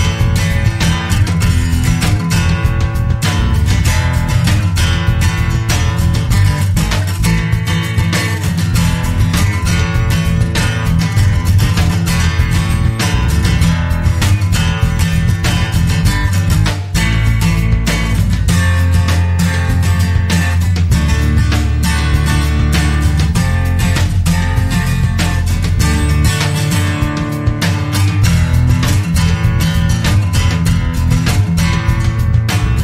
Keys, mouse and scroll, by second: 0.8 click, 3.1 click, 6.0 click, 9.0 click, 12.4-13.1 scroll down 2, 13.1-13.6 scroll down 4, 19.8 click, 25.1 click, 27.7 click.